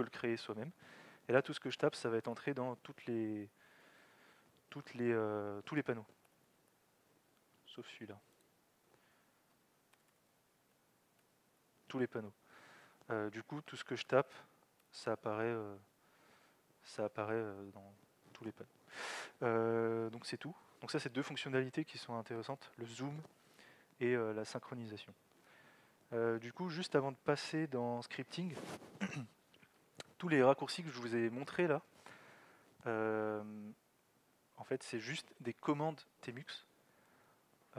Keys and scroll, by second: 3.1 ctrl+c, 3.5 ctrl+c, 3.8 ctrl+c, 3.9 ctrl+c, 6.3 ctrl+l, 11.2 ctrl+l, 13.8-15.3 typing, 17.6 ctrl+c.